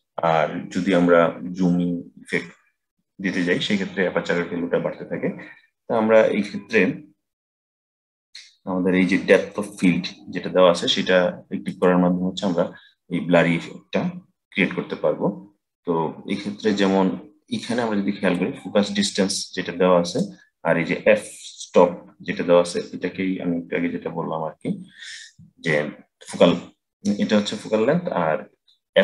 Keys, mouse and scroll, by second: 9.6 click, 11.5-14.5 drag, 18.2-21.2 drag.